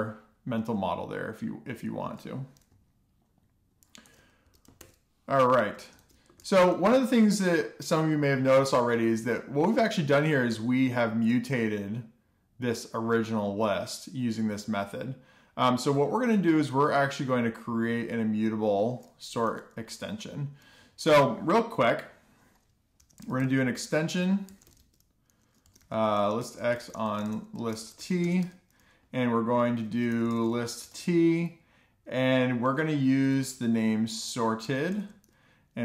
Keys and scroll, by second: 6.1 F2, 6.2-7.0 typing, 8.0 alt+shift+f, 8.4 super+s, 21.3 Return, 21.4 Return, 24.7-30.6 typing, 31.7-33.2 typing, 34.8-35.8 typing.